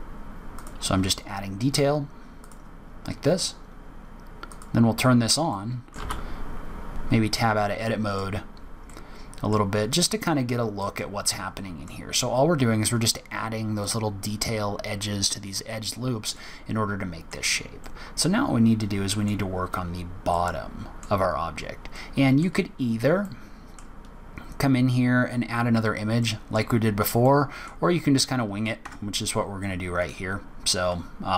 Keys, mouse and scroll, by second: 0.9 s, 2.8-3.2 scroll down 3, 4.5 click, 5.4 middle click, 5.9 z, 6.3 z, 6.7 Tab, 6.9 middle click, 8.2-8.8 scroll down 6, 8.8 middle click, 9.7-10.7 scroll up 6, 10.7 middle click, 13.3-13.7 scroll up 1, 16.3 middle click, 17.6 scroll down 1, 17.8 middle click, 19.7-20.2 scroll down 3, 20.2 middle click, 21.3-21.8 scroll down 6, 21.8 middle click, 22.7 scroll up 5, 23.1 middle click, 25.6-26.7 scroll down 6, 26.1 middle click, 27.1 middle click, 28.0-28.9 scroll up 7, 28.7 Tab, 29.4-29.9 scroll up 2, 29.9 click.